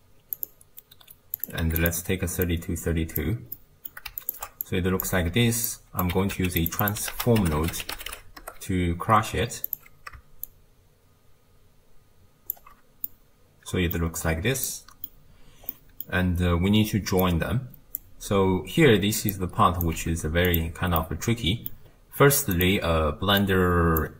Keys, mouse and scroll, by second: 1.4 click, 2.5 click, 3.6-4.3 middle drag, 4.3 ctrl+shift+click, 5.7 click, 6.1 g, 6.8 click, 7.1 ctrl+a, 10.5-13.1 shift+drag, 13.1-14.2 middle drag, 14.2-14.7 scroll down 1, 14.7-16.2 middle drag, 16.2-17.3 scroll down 3, 17.3 click, 18.6-19.3 scroll down 3, 19.3 click, 20.0 g, 21.0 middle click, 21.9-22.6 scroll up 2, 22.6 click, 23.5 drag.